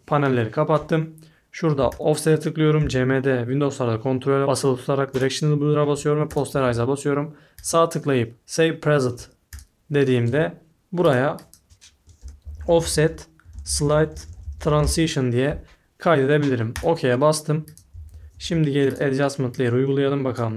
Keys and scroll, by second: 11.9-15.4 typing, 17.7-18.9 typing.